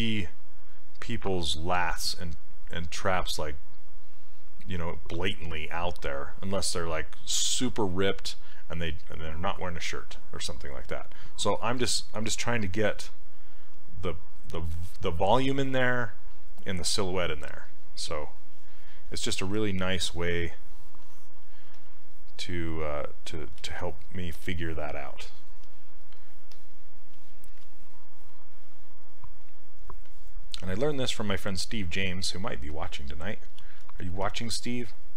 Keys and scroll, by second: 21.7 s, 23.7 ctrl+z, 33.6 ctrl+z.